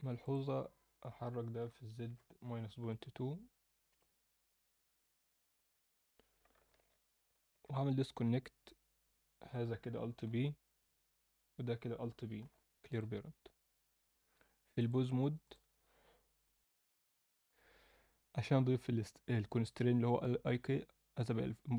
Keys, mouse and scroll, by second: 0.2 click, 1.6 g, 5.9 click, 6.6 alt+shift+middle click, 7.4 shift+click, 7.8-9.0 scroll down 1, 9.0 scroll down 1, 9.0 click, 10.3 alt+p, 11.4 click, 12.4 alt+p, 14.8-15.5 drag.